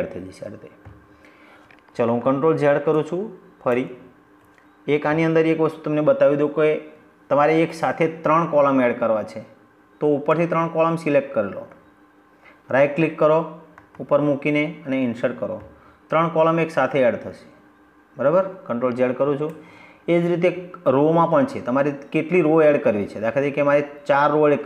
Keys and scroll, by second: 1.8 ctrl+z, 18.3 ctrl+z.